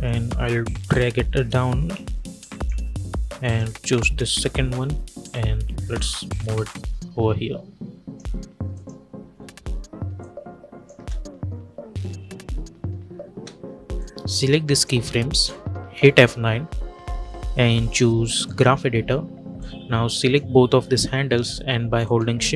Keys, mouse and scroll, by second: 10.8 space, 13.8-15.8 drag, 15.8 F9, 18.3-22.5 drag.